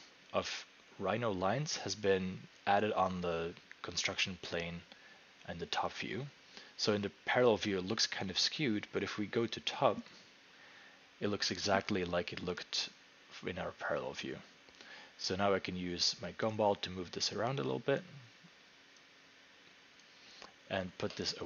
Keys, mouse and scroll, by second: 10.1 click, 18.0 click, 20.0 click.